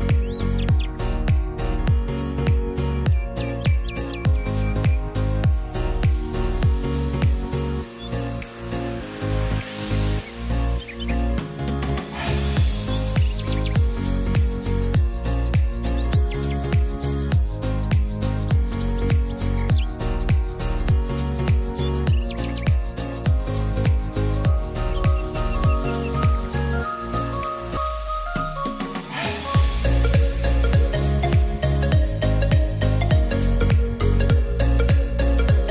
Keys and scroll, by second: 35.3-35.7 typing.